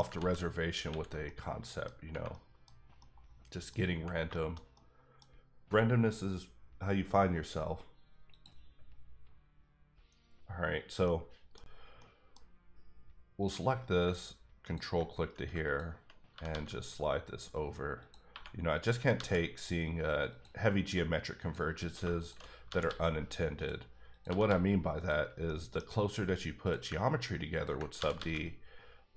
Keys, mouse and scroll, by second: 0.2 ctrl+z, 0.9 ctrl+x, 1.2 middle click, 2.3 middle click, 2.7 scroll down 1, 3.0 middle click, 3.8 scroll up 1, 3.9 Tab, 4.3 shift+middle click, 8.3 click, 8.4 click, 11.0 middle click, 11.9 middle click, 13.4 click, 16.3 g, 16.4 g, 18.0 click, 18.3 1, 18.7 click, 18.9 g, 19.1 g, 20.3 click, 21.4 click, 22.2 shift+click, 22.6 g, 22.8 g, 23.5 click, 24.1 click, 24.2 g, 24.4 g, 24.9 click, 25.4 middle click, 26.0-26.6 scroll up 1, 26.6 click, 27.9 g, 28.1 g.